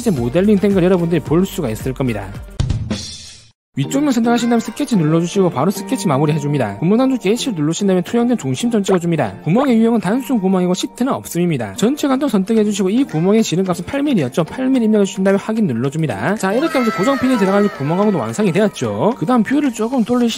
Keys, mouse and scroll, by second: 5.0 click, 5.8 s, 6.6 s, 9.5 click, 10.7 click, 11.6 click, 14.3 click, 16.4 click, 19.3 middle click, 19.7 shift+middle click.